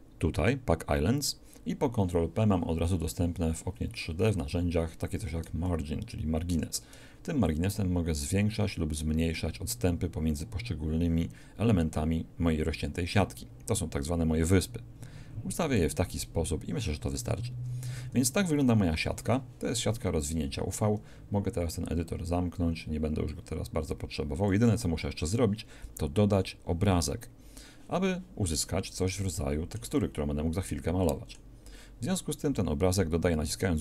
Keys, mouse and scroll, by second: 7.5-8.9 ctrl+drag, 23.4-25.2 drag, 28.5 middle click.